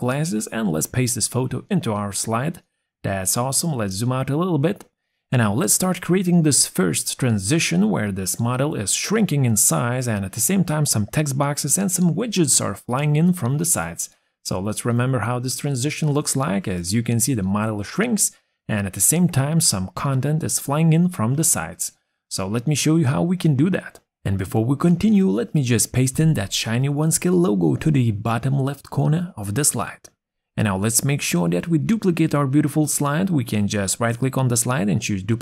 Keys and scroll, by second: 1.7 ctrl+v, 30.8 ctrl+c.